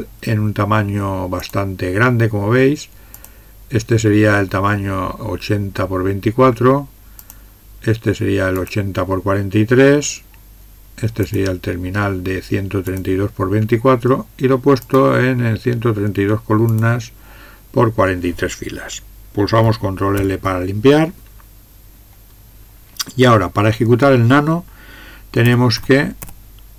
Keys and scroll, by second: 20.2 ctrl+l, 25.5-26.7 typing.